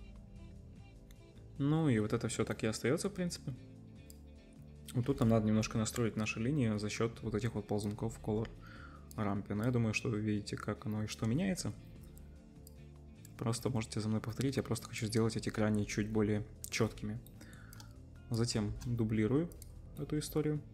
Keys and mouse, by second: 11.7-16.9 right drag, 18.7 shift+d, 19.6-20.7 middle drag.